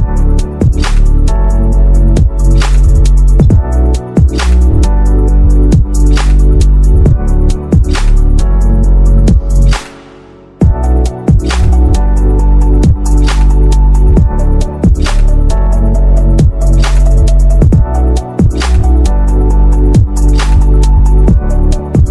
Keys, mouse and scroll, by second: 4.1 [, 4.4 [, 5.4-8.4 typing, 9.5 ].